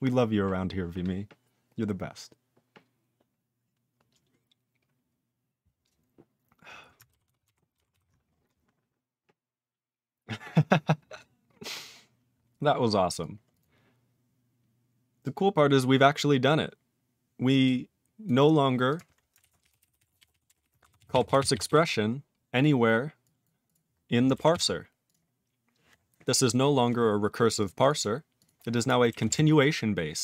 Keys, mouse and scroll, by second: 7.2 ctrl+s, 7.4 ctrl+alt+f, 7.9 ctrl+s, 10.1-11.7 scroll down 3, 11.7-13.1 scroll up 9, 13.1 click, 13.1 click, 13.5 click, 13.5 click, 14.0 click, 15.6-16.7 scroll down 5, 16.7 scroll up 8, 18.2 click, 18.4-18.8 scroll up 6, 18.8 click, 18.9 click, 19.3-21.1 typing, 21.2 ctrl+s, 21.3 ctrl+s, 21.5 ctrl+s, 21.6 ctrl+s, 22.5 click, 23.2 click, 23.4 click, 23.6 click, 23.7 click, 23.9-24.4 scroll down 5, 24.5 ctrl+s, 24.7-25.8 scroll down 6, 25.0 click, 25.1 click, 26.4 scroll up 7, 27.4 click, 27.5 click, 27.5 double click, 27.6 double click, 27.7 click, 27.8 click, 27.9 double click, 27.9 double click, 28.3 click, 28.4 click, 29.0 click, 29.2 ctrl+s, 29.6-30.2 scroll down 3.